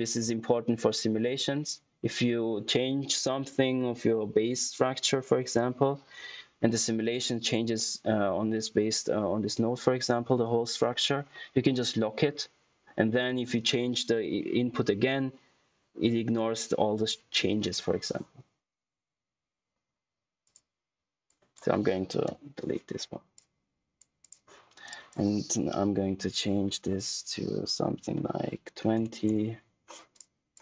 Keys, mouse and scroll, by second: 20.4 click, 23.3 click, 30.1 click.